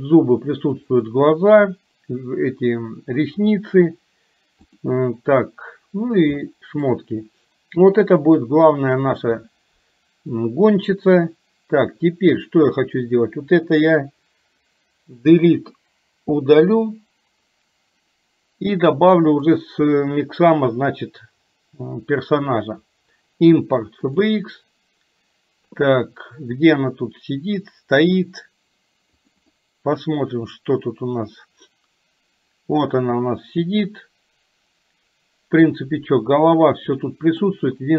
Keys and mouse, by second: 1.0 click, 6.5 shift+middle click, 16.3 Delete, 19.5-24.6 drag, 33.1-37.5 middle drag.